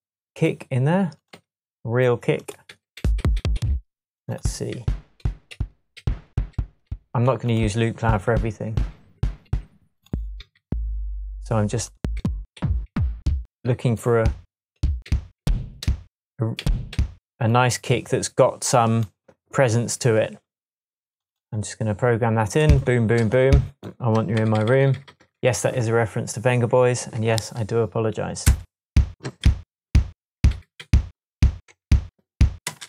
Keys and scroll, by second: 1.3 Right, 2.7 Down, 3.6 Down, 4.8 Down, 5.2 Up, 5.5 Up, 8.0 Down, 9.2 Up, 10.4 Down, 12.2 Down, 13.0 Down, 13.2 Down, 14.2 Down, 14.8 Up, 15.1 Down, 15.4 Down, 15.8 Up, 16.6 Down, 16.9 Up, 24.4 super+d, 25.0 super+d, 25.6 super+d, 25.8 super+d, 26.4 super+d, 28.5 space, 29.2 space, 29.4 super+d, 31.5 shift+super+d, 31.7 shift+super+Tab, 32.7 shift+space.